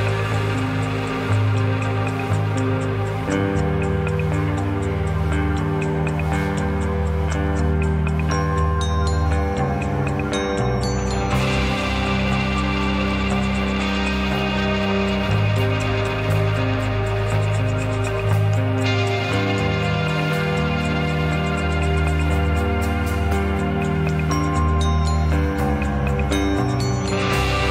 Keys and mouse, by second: 6.4 shift+click, 6.9 shift+a, 12.2 s, 13.4 g, 16.0 Tab, 16.8 click, 17.3 x, 18.5 Tab, 19.3 click, 20.2 e.